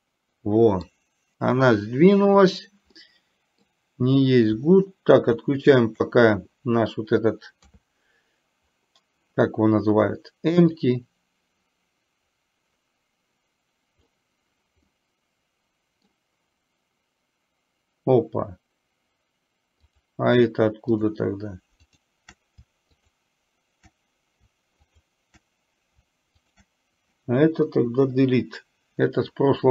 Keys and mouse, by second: 3.1 middle click, 5.2 shift+click, 10.9 click, 11.1-14.2 drag, 15.0-16.1 middle drag, 20.0 click, 21.0 shift+click, 22.0 shift+click, 23.1 shift+click, 25.0 shift+click, 26.5 shift+click.